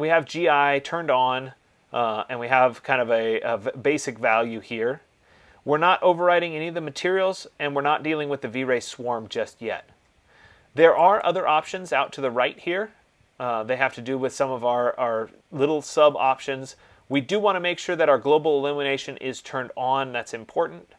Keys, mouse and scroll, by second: 11.6-16.4 drag, 17.6-20.9 drag.